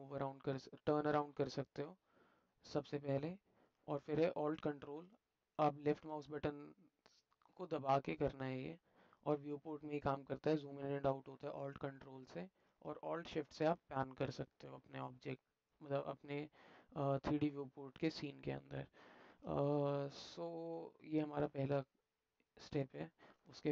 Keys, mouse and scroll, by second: 1.4-4.0 alt+middle drag, 4.7-5.5 ctrl+alt+middle drag, 6.0 ctrl+alt+middle click, 7.5-10.7 ctrl+alt+middle drag, 10.7-12.6 ctrl+alt+drag, 13.1 alt+shift+middle click, 13.3 alt+shift+click, 13.7-19.3 alt+shift+middle drag, 20.3 middle drag, 20.4-21.6 alt+drag, 22.4 alt+click, 23.1 shift+click.